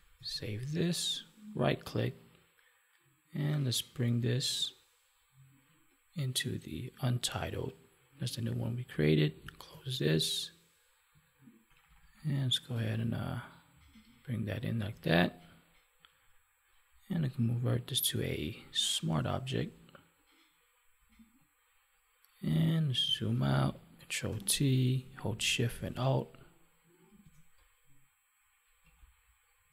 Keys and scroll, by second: 11.6 ctrl+-, 14.8 ctrl+1, 23.0 ctrl+-.